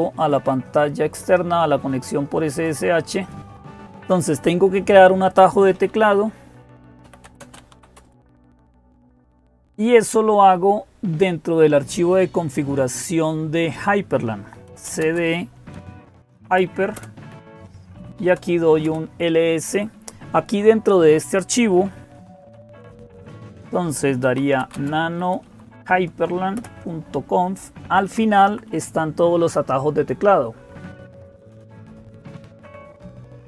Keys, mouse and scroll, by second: 0.0-33.4 typing, 0.0-3.1 drag, 16.7 Return, 27.6 Down, 27.9 Down, 28.0 Down, 28.2 Down, 28.9 Page_Down, 29.5 Page_Down, 31.5 Page_Down.